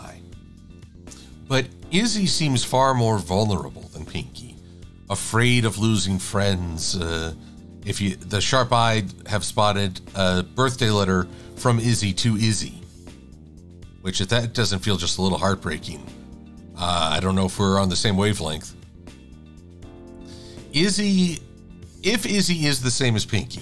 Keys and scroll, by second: 2.8 shift+super+a, 11.3 shift+x.